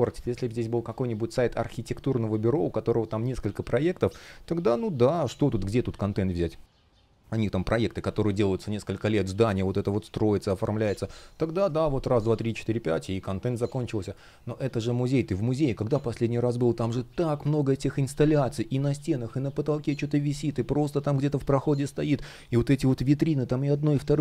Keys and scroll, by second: 0.0 space, 11.8 space.